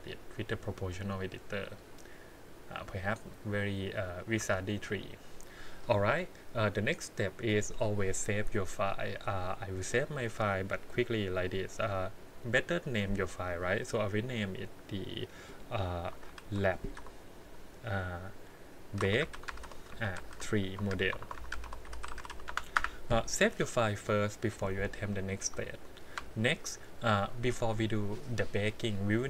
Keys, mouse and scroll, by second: 4.4 Tab, 5.8 click, 7.5-9.3 drag, 25.7-26.1 shift+middle drag.